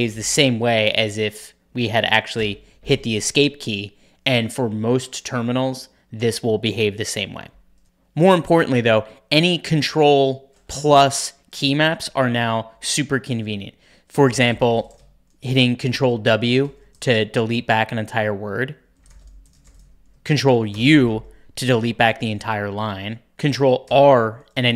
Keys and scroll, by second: 0.0-1.4 typing, 2.3 Escape, 14.0 ctrl+w, 14.0-15.3 typing, 15.7 ctrl+w, 16.3-17.1 typing, 18.7-20.2 typing, 20.6 ctrl+u, 23.8 ctrl+r.